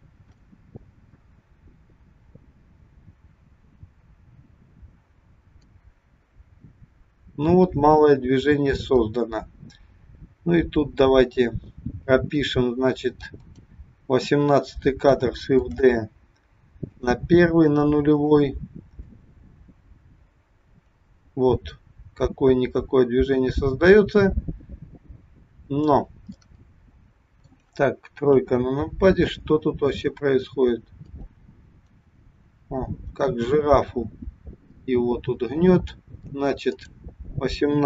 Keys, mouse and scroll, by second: 1.2 click, 13.5 click, 15.7 shift+d, 18.2 click, 19.2 click, 26.5 middle click, 28.3 KP_3, 30.1 click, 36.7 click.